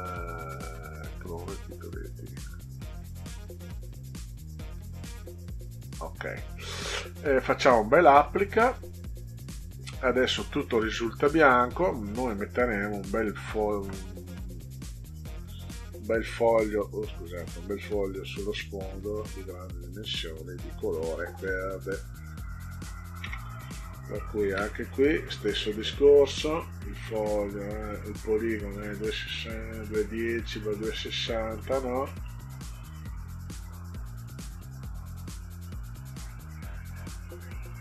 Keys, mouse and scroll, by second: 1.9 click, 5.1 click, 7.3 click, 9.0 click, 12.8 click, 15.0 click, 15.7 ctrl+scroll down 2, 16.8 ctrl+scroll up 2, 17.1 ctrl+middle click, 19.9-22.2 drag, 24.1 ctrl+scroll up 2, 29.0 scroll up 2, 29.1 middle click, 31.1 middle click, 32.0 middle click, 34.8-37.3 drag.